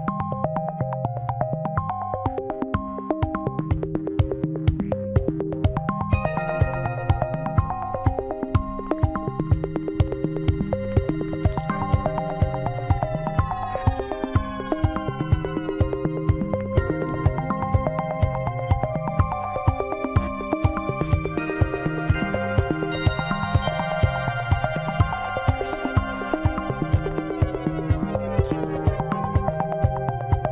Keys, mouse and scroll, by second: 0.4 shift+d, 2.6 s, 9.0-10.5 middle drag, 10.5-11.0 scroll up 5, 11.5-12.7 middle drag, 12.7 scroll down 1, 13.4 scroll up 1, 14.5 p, 18.4 click, 19.7 Tab, 20.3 click, 21.0-24.1 middle drag, 24.8 s, 26.3 g, 27.5 middle click, 28.2-29.2 scroll up 1, 29.2 s, 30.4 g.